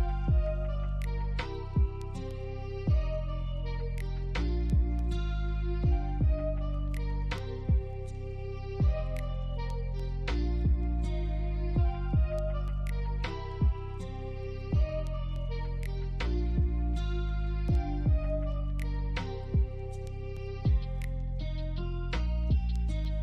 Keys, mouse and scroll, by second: 0.4 shift+click, 1.8 alt+middle click, 4.0 alt+middle click, 4.4 scroll down 1, 4.9 alt+click, 5.7 alt+middle click, 6.1 alt+click, 7.4 ctrl+click, 12.1 alt+click, 13.3 alt+middle click, 22.5 alt+middle click.